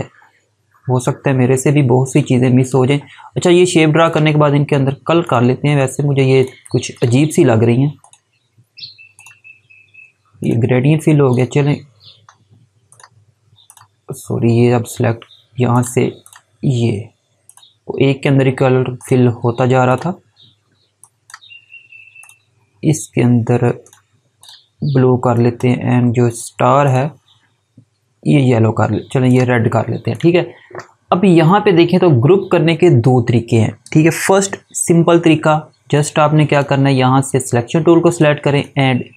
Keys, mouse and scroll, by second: 1.9 click, 19.2 click, 25.2 click, 29.2 click, 34.0 click, 38.7 click.